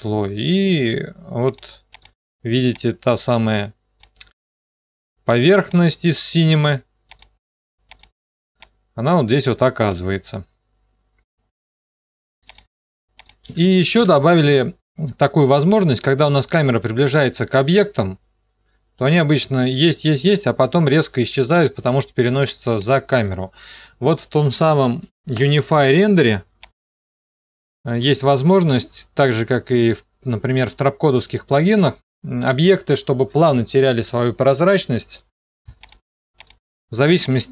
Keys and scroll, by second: 14.3 Delete.